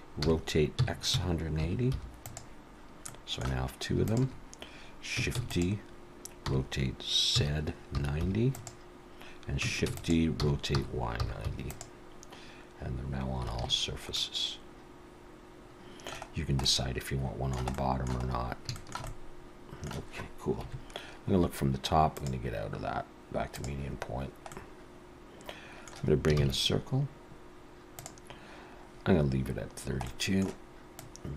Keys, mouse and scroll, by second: 0.2 r, 3.1 middle click, 4.1 shift+click, 5.4 shift+d, 6.5 r, 9.9 shift+d, 10.4 r, 13.6 alt+a, 14.1 middle click, 16.3-17.1 scroll down 2, 16.6 middle click, 17.7 middle click, 18.3-18.7 scroll up 3, 18.8 shift+middle click, 19.1 middle click, 20.6 KP_7, 22.2 click, 24.5 middle click, 26.4 shift+a, 29.7 scroll down 2, 30.1 middle click, 31.0 click.